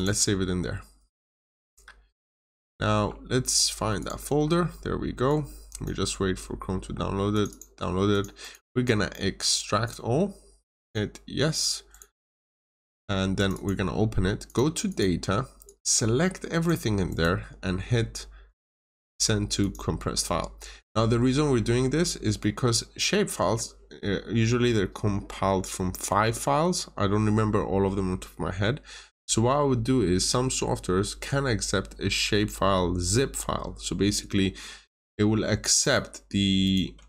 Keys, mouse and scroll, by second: 2.8 alt+Tab, 3.9 alt+click, 5.2 click, 7.4 double click, 8.0 click, 8.3 right click, 9.8 click, 11.8 right click, 12.5 click, 13.4 double click, 14.4 click, 14.8 double click, 15.6 click, 17.0 right click, 19.5 click, 35.4-35.7 scroll up 1, 35.7 right click, 36.6 click.